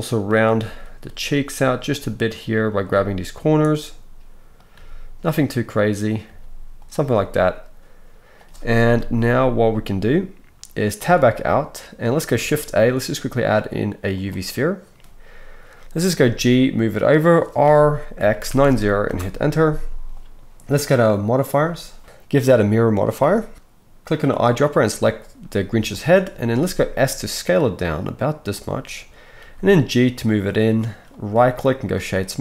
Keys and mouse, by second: 0.6 g, 2.9 g, 4.7 g, 6.2 g, 8.9 KP_1, 11.0 Tab, 12.3 shift+a, 16.1 g, 17.6 r, 21.5-24.3 middle drag, 26.6 s, 29.4-32.4 right drag, 29.4 g.